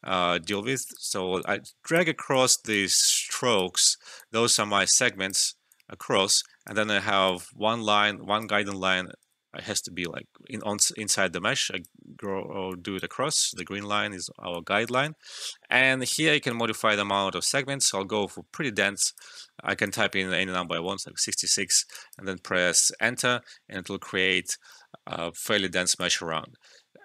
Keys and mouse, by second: 9.2 ctrl+z, 9.7-12.3 drag, 12.3 alt+middle click, 12.6 alt+click, 13.3 alt+right click, 13.6 alt+middle click, 14.5 alt+click, 15.1 alt+middle click, 16.4-19.8 drag, 20.6 typing, 20.9 Return, 21.6 alt+middle click, 21.9 alt+click, 22.9 Return, 23.9 alt+middle click, 26.0-27.0 alt+drag.